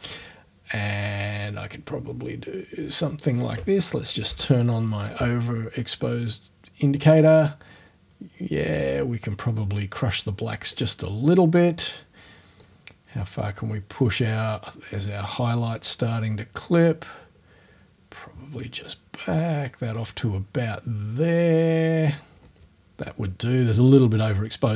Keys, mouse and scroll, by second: 1.7-3.4 drag, 4.3 o, 7.0-10.9 drag, 12.6-22.4 drag, 22.4-23.6 scroll up 1.